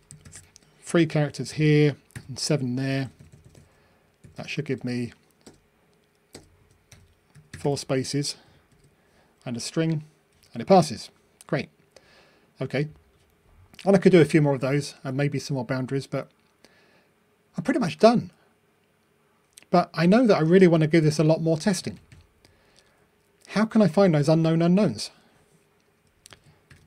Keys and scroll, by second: 9.0 ctrl+r.